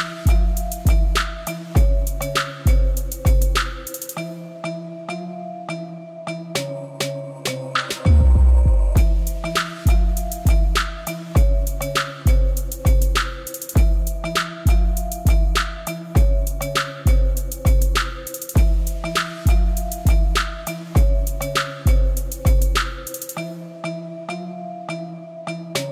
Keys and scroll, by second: 0.2 b, 3.4 b, 8.6 shift+z, 22.4 g, 22.7 l, 22.9 d, 23.3 Return.